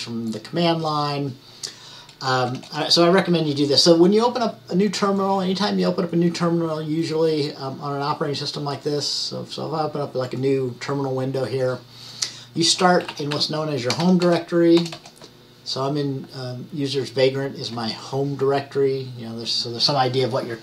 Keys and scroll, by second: 12.9-14.6 typing.